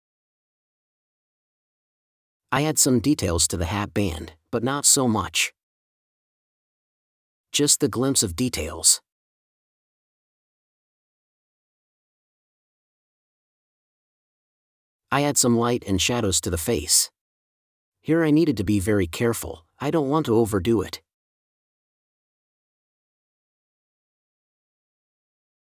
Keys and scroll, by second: 0.0 super+space, 0.6 space, 1.5 1, 2.6 super+z, 4.8 space, 5.5 5, 6.1 space, 7.6 1, 8.6 space, 9.1 n, 10.7 space, 11.7 super+z, 12.5 1, 14.8 space, 15.3 5, 16.0 super+z, 16.6 1, 18.2 n, 19.2 space, 19.9 super+z, 20.5 space, 24.3 space, 25.3 space.